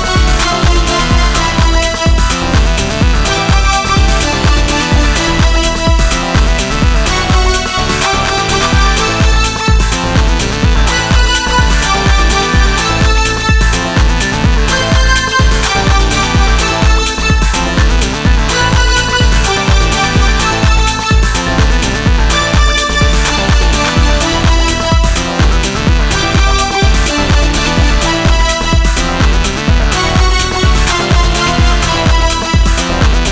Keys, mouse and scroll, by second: 1.5 Tab, 2.5 shift+z, 7.8 shift+z, 9.5 shift+z, 10.4 shift+z, 14.5 shift+z, 17.3 shift+z, 19.8 KP_1, 22.2 right click, 24.7 Tab, 27.3 z.